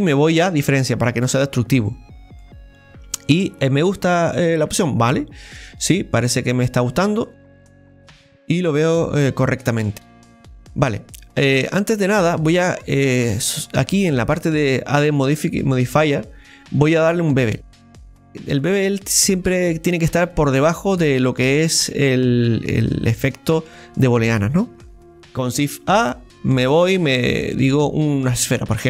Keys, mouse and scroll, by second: 2.4-5.5 middle drag, 7.0-7.6 scroll up 1, 7.6 scroll up 4, 7.6-10.5 middle drag, 10.5-13.7 scroll down 1, 13.7 scroll down 4, 13.8-18.3 drag, 22.6 scroll down 1, 22.9 middle click, 23.5-25.3 scroll up 2, 25.6 scroll up 2, 28.1 shift+a.